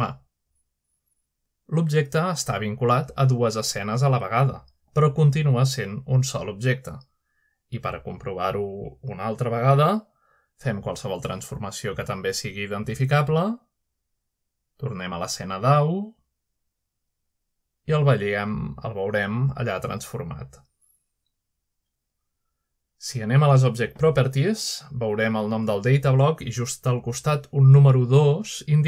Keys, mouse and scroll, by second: 1.2 click, 1.8-2.2 shift+drag, 2.2 shift+middle click, 4.1-4.7 middle drag, 4.7-5.4 scroll down 1, 9.1-9.6 shift+middle drag, 10.8-11.5 middle drag, 13.4 click, 16.1 click, 16.4-17.0 scroll down 1, 17.5 click, 18.1 click, 22.3 middle click, 23.2-23.9 middle drag, 26.2 click.